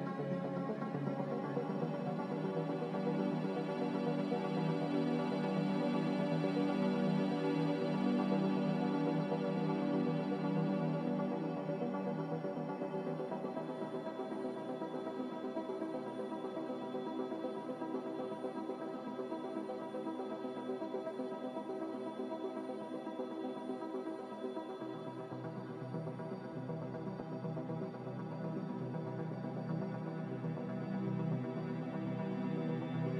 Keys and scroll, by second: 3.0 Return, 13.0 ctrl+z, 16.1-16.9 typing, 22.1 ctrl+z, 22.9-24.6 typing, 29.2 Delete, 29.7 c.